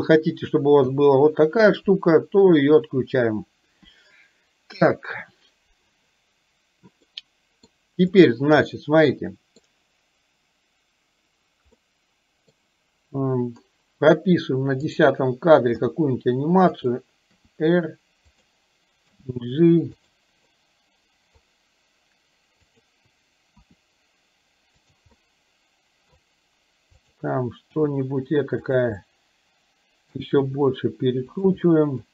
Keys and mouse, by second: 0.9 i, 7.3-7.8 middle drag, 8.8-9.8 middle drag, 12.0 middle click, 15.0 click, 15.9 g, 17.4 r, 19.3 g, 20.6 middle click, 22.8 click, 23.8 r, 25.3-26.3 middle drag, 27.3 click, 27.8 g, 29.0-30.3 middle drag, 30.6 r, 31.8 middle click.